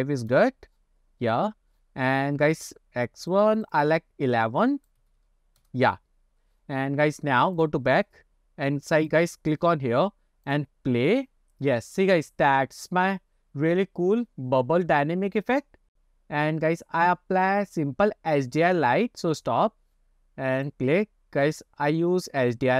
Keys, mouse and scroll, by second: 1.4 scroll up 2, 2.5-5.7 drag, 5.2 KP_1, 6.3 scroll up 2, 7.6 click, 9.1 click, 10.5 click, 20.0 click, 20.6 click, 21.5-22.6 drag.